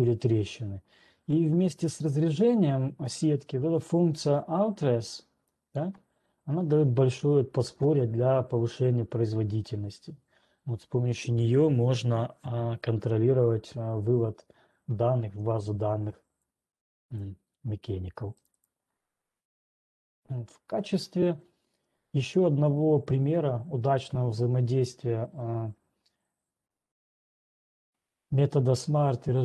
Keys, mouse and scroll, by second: 5.8 click, 17.3 click, 18.8 click, 19.3 click, 19.9-22.3 scroll, 23.7 scroll.